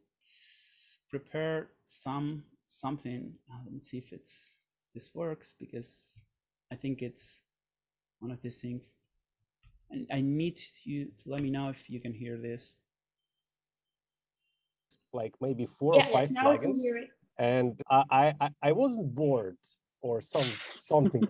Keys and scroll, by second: 9.8 super+/, 11.2 Down, 11.5 Return.